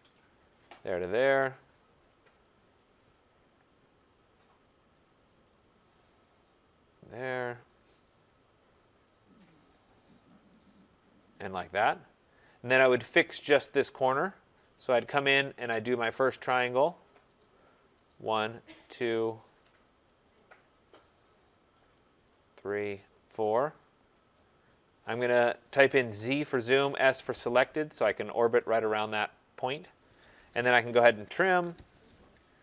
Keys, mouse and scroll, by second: 0.0 right click, 0.5 click, 0.9 click, 2.1 right click, 2.4 click, 2.8 click, 3.6-4.6 scroll, 4.6 right click, 5.0 click, 6.0 click, 7.5 right click, 7.7-8.9 scroll, 9.4 right click, 10.0 right click, 10.3 click, 10.7 click, 11.4 middle click, 11.8 middle click, 11.8 middle click, 13.2 right click, 13.2-13.7 scroll, 13.7-15.5 scroll, 16.1 click, 16.5 scroll, 17.5 click, 18.5 click, 19.8 scroll, 20.0 right click, 20.3 scroll, 20.9-21.3 scroll, 22.3 click, 23.2 click, 24.1 click, 25.3 click, 26.3 z, 26.4 Return, 26.8 s, 27.0 Return, 27.9-28.4 scroll, 28.7 typing, 29.9 right click, 30.6-31.9 typing.